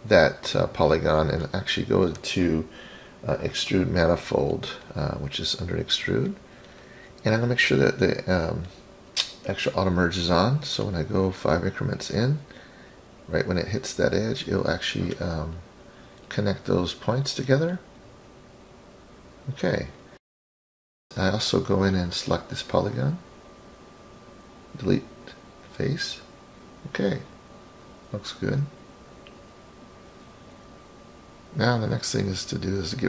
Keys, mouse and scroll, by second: 0.2 click, 1.4-2.1 middle drag, 5.6 click, 7.6 click, 8.9 drag, 9.7-10.6 scroll down 5, 10.4 middle click, 11.8-16.7 drag, 17.8 click, 18.4 middle click, 20.1 click, 21.8 click, 23.3 Delete, 25.4-26.8 scroll up 11, 27.6-29.5 middle drag, 29.8-30.5 scroll down 3, 30.5 scroll down 1, 31.2 click, 31.2 scroll down 1.